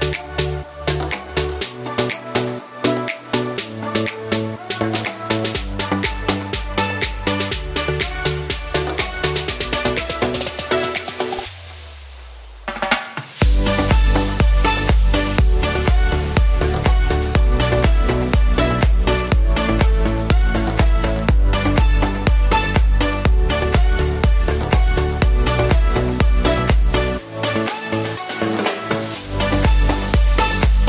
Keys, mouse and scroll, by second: 25.8-27.1 typing, 29.0 ctrl+alt+shift+z.